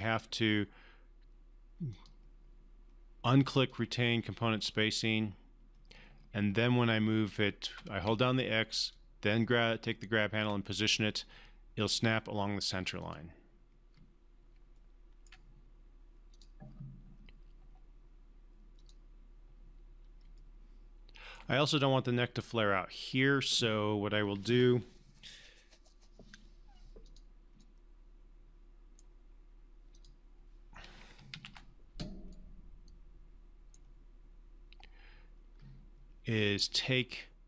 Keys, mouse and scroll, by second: 1.9 click, 7.6-10.5 typing, 8.9 click, 12.7 typing, 13.1 click, 14.7-15.3 alt+middle click, 15.4-16.3 scroll up 1, 16.3 click, 18.7 click, 20.4-21.6 alt+middle drag, 27.0 click, 27.6-29.1 right drag, 29.9 click, 31.3 ctrl+z, 32.3-33.8 right drag.